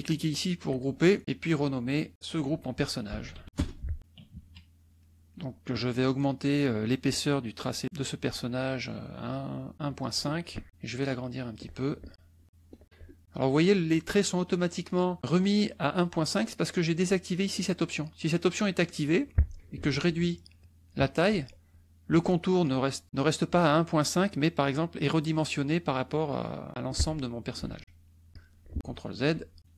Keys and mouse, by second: 0.6 click, 1.4 click, 2.1 click, 3.0-3.9 typing, 4.2 KP_Subtract, 5.0 middle click, 5.7 click, 7.6 right click, 9.8 click, 10.6-11.7 ctrl+drag, 12.4 ctrl+click, 13.0 click, 17.5 click, 18.3 click, 18.8 click, 20.0-21.1 ctrl+shift+drag, 27.6 ctrl+shift+click, 28.8 ctrl+z.